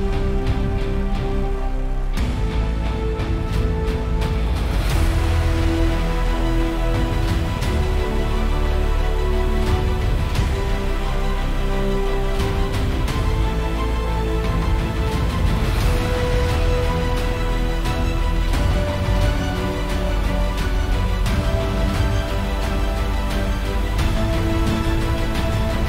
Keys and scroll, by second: 0.3 super+g, 3.0 Return, 22.9 super+Tab.